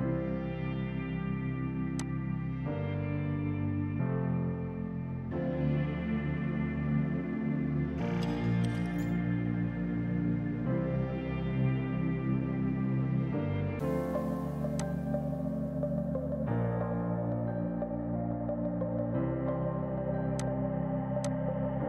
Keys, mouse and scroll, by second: 2.0 click, 5.4-10.2 scroll down 1, 14.8 click.